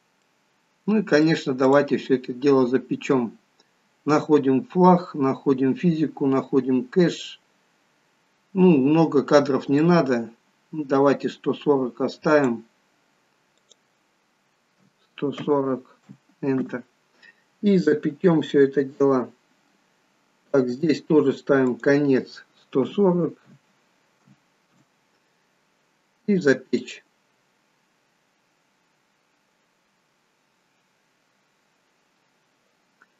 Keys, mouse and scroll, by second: 0.3 middle click, 1.6 click, 5.6-7.2 scroll down 2, 7.2 click, 7.2-8.8 scroll down 2, 9.8 click, 13.6 click, 18.1-18.8 scroll down 2, 21.8 click, 26.8 click.